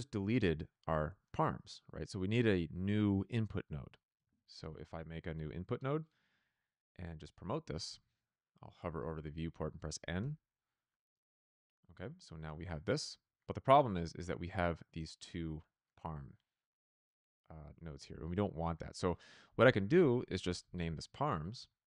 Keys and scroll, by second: 4.1 Tab, 4.2-5.4 typing, 20.3-21.4 typing, 21.5 Return.